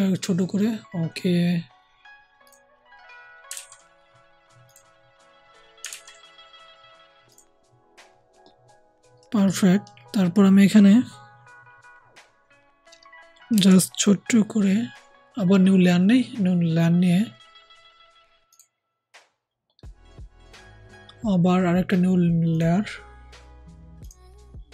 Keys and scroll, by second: 3.5 ctrl+z, 5.8 ctrl+z, 13.5 [.